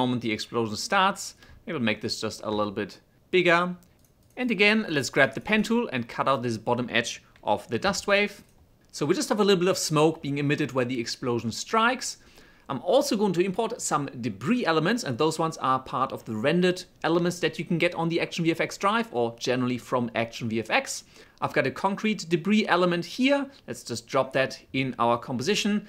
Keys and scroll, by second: 5.8 space, 7.2 m, 7.7 m, 8.4 5, 13.0 v.